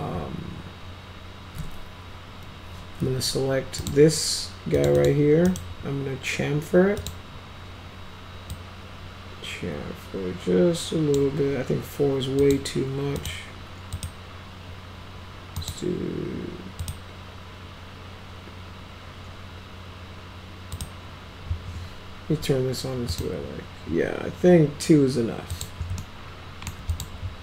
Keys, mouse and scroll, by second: 3.7 click, 4.7 click, 4.9 click, 5.4 right click, 6.9 click, 8.4-11.1 drag, 12.3 click, 13.1 click, 13.9 click, 15.5 click, 16.7 click, 20.7 click, 23.0 click, 25.4 click, 25.9-26.6 alt+middle drag, 26.8 click.